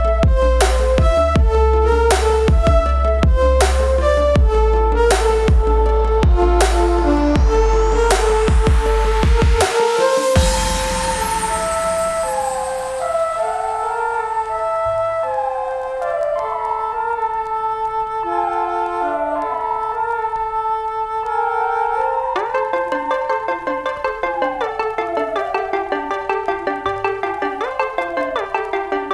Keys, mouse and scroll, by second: 5.1 click, 9.7 ctrl+space, 9.9 ctrl+click, 10.1 ctrl+space, 10.6 click, 10.7 space, 11.4-14.6 ctrl+drag, 14.6 ctrl+space, 14.7 ctrl+click, 15.0 ctrl+space, 15.4 v, 16.0 space, 16.2 click, 16.4 space, 16.9 click, 18.0 space, 18.2 click, 18.4 space, 18.7 ctrl+click, 23.1 typing.